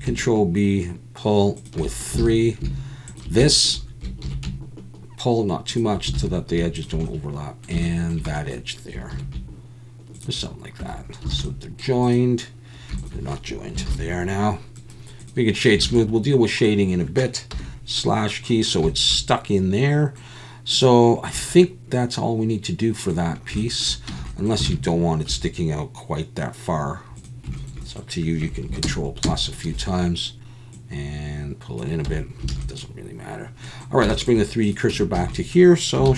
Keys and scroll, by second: 2.2 alt+a, 4.2 ctrl+b, 6.2 alt+a, 9.1 ctrl+b, 10.8 Tab, 11.3 alt+a, 13.9 ctrl+j, 15.8 alt+a, 17.5 /, 24.1 Tab, 24.7 alt+a, 25.3 3, 28.8 ctrl+KP_Add, 29.2 ctrl+KP_Add, 32.1 Tab, 32.5 alt+a, 34.9 Tab, 35.1 a, 36.0 shift+s.